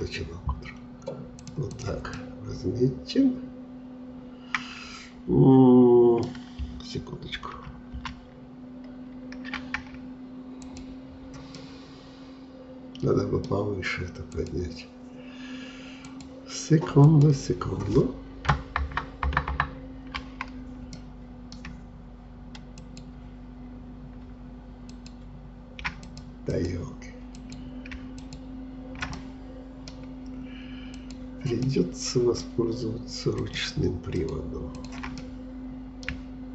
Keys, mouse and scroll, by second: 1.7 click, 2.2-5.3 middle drag, 7.6 ctrl+z, 8.0 ctrl+z, 10.7 click, 11.6-14.4 middle drag, 14.4-18.8 drag, 18.8 ctrl+KP_Add, 19.3 ctrl+KP_Add, 19.5 ctrl+KP_Add, 21.0-22.8 middle drag, 22.8-28.4 shift+drag, 29.2-31.0 middle drag, 31.0 click, 31.7-33.4 middle drag, 33.4-35.2 shift+drag, 35.2-36.5 middle drag.